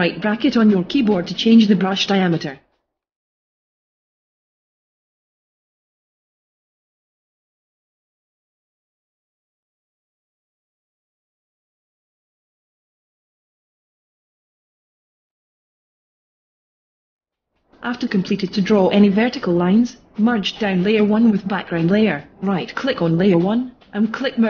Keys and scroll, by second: 3.2 ], 5.7 ], 5.9 [, 9.8 [, 12.4 ], 15.3 ].